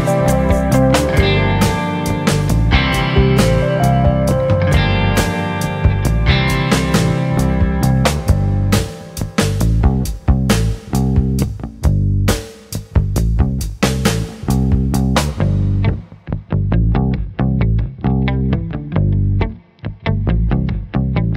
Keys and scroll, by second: 5.0-5.7 typing.